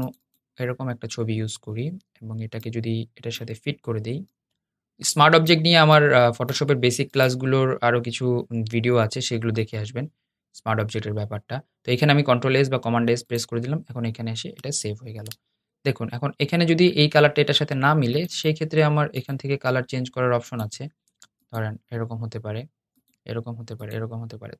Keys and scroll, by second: 8.9 super+s.